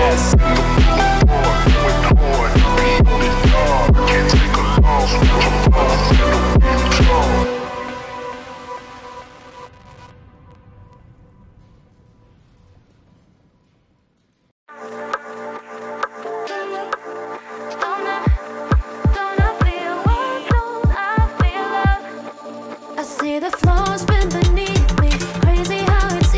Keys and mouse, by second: 0.4-2.1 drag, 2.9 click, 3.3 shift+click, 4.3 m, 6.1 click, 7.1 g, 9.1 click, 9.3 middle click, 9.7 g, 10.8 click, 11.0 g, 12.0-13.8 drag, 14.3 click, 14.8 g, 15.8 click, 16.0 g, 17.0 click, 17.3 g, 18.3-19.3 drag, 19.7 click, 21.2 click, 21.7 shift+click, 22.7 j, 23.1 2, 23.3 click, 23.6 x, 24.6 click.